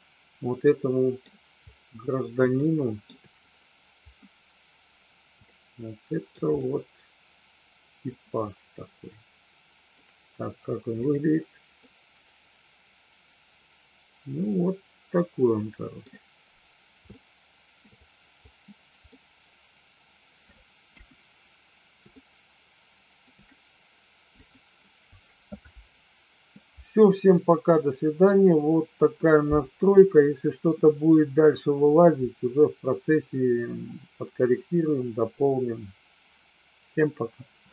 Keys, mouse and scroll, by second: 2.6 shift+middle click, 5.5 shift+middle click, 6.5-10.0 middle drag, 11.8-16.1 middle drag, 17.2 shift+middle click, 19.1-20.4 middle drag, 21.0 KP_1, 22.2-23.2 middle drag, 24.5 click.